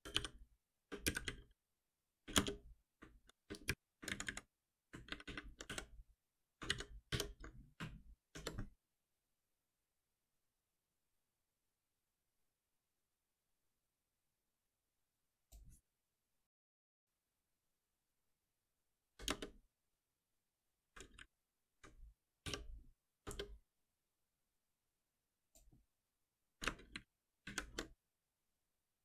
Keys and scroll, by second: 0.8 Return, 5.1 ctrl+shift+Right, 5.6 Delete, 6.7 ctrl+s, 7.1 ctrl+F9, 8.2 shift+F10, 16.5 alt+Return, 22.4 F6, 26.9 ctrl+shift+Up.